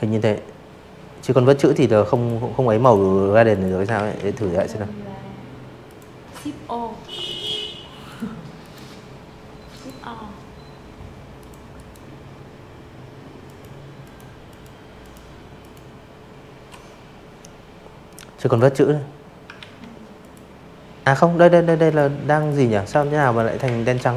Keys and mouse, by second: 0.4 click, 0.9 ctrl+z, 1.3 v, 2.8 click, 4.2 click, 5.0 click, 5.6 click, 6.6 click, 8.4 click, 8.7 right click, 10.4 click, 11.4 click, 12.5 click, 15.3 click, 16.5 ctrl+z, 17.1 click, 18.6 v, 18.8 click, 19.3 click, 19.8-22.2 typing, 19.9 click, 20.3 click, 20.9 click, 21.2 click, 21.6 click, 21.9 click, 22.3 click, 22.6 click.